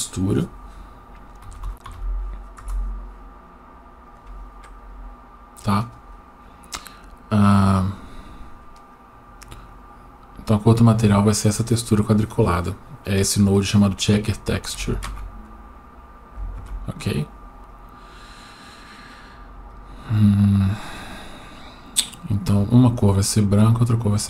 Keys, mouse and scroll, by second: 8.9 click, 9.5-10.7 drag, 13.8 click, 17.7-19.9 drag, 22.3 click.